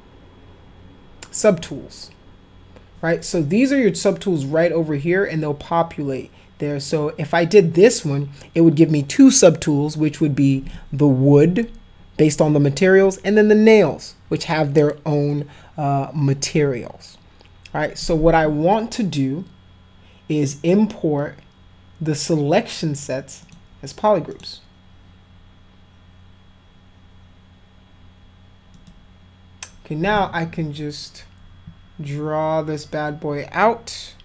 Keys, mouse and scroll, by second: 23.4 click, 24.3 click, 28.7 click, 30.2-34.2 drag.